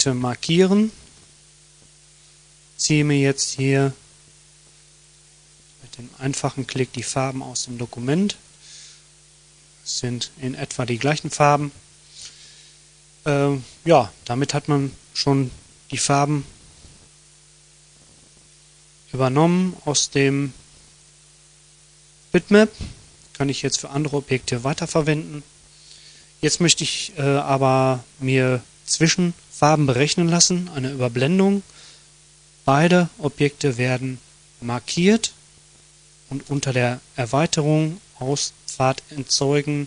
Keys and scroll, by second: 1.0 F1, 2.0 F7, 3.8 F1, 4.8 F7, 23.5 Delete.